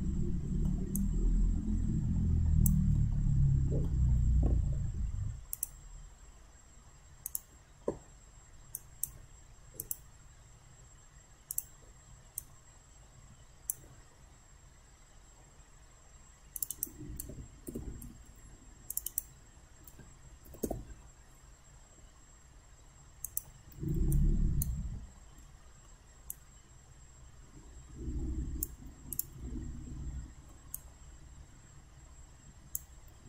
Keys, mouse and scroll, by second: 1.0-2.7 alt+drag, 3.0 alt+middle click, 5.6-14.2 drag, 17.7 typing, 18.9 click, 20.2-21.2 typing, 23.2 click, 24.2 alt+right click, 25.5 alt+middle click, 26.3-28.6 alt+drag, 29.2 click, 29.8 alt+middle click, 30.8-32.8 alt+drag.